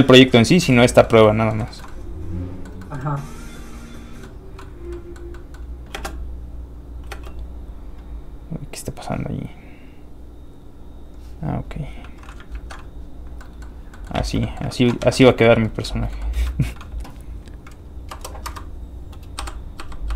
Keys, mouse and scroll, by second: 0.6 shift+middle click, 1.7 shift+middle click, 1.9 middle click, 3.4 click, 4.2 middle click, 4.8 scroll down 1, 4.9 middle click, 5.9 space, 9.8 click, 12.5 ctrl+alt+Tab, 13.2 scroll down 1, 13.4 Tab, 13.4 middle click, 13.6 scroll up 1, 13.9 middle click, 14.2 alt+shift+z, 14.4 middle click, 15.0 alt+shift+z, 15.3 shift+middle click, 15.6 middle click, 15.6 scroll up 1, 15.8 shift+middle click, 16.3 shift+scroll down 1, 16.5 shift+middle click, 18.0 click, 18.1 KP_0, 18.4 Return, 19.4 i.